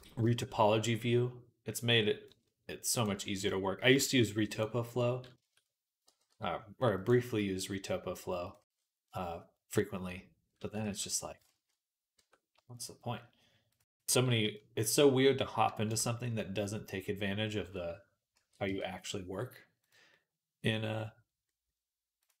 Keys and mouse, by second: 2.8-4.4 middle drag, 4.4 click, 5.9 g, 10.7 ctrl+z, 11.3 ctrl+z, 12.0 Tab, 12.0-13.5 middle drag, 12.4 Tab, 13.5-19.7 drag, 18.2 ctrl+a, 19.7-22.4 middle drag, 22.0 right click.